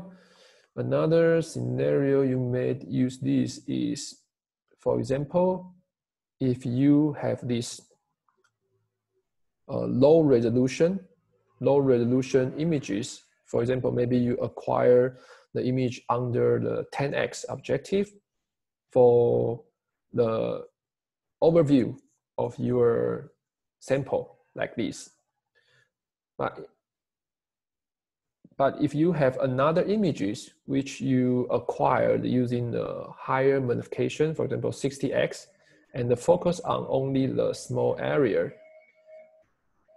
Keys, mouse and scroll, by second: 9.6 Escape.